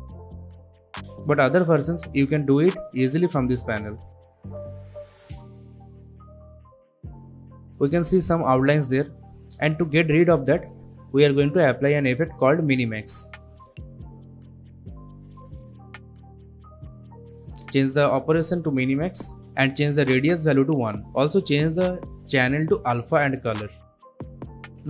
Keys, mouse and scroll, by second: 0.0 click, 4.3-7.7 drag, 8.5-9.9 scroll up 1, 9.9-10.7 scroll down 1, 10.7 click, 11.2-12.5 typing, 13.1 click, 21.1 Up, 22.1 click, 22.6-23.6 scroll down 1, 23.6-24.8 drag.